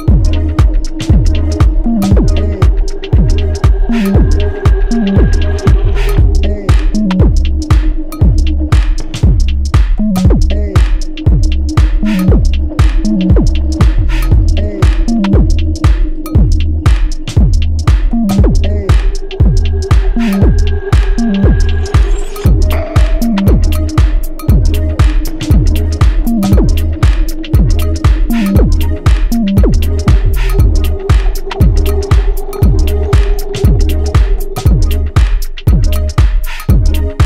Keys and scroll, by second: 15.6 ctrl+z, 35.4 ctrl+j.